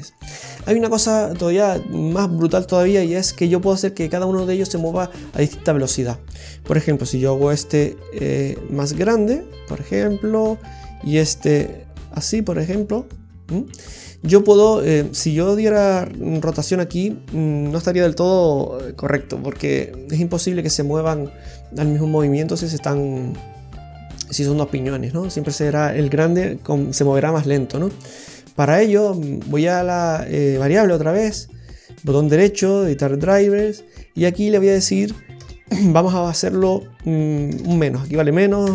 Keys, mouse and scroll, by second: 6.0 right click, 6.9 d, 7.6 click, 8.3 s, 10.6 right click, 11.5 s, 15.3 right click, 16.3 r, 29.4 right click, 31.8 right click, 37.6 BackSpace.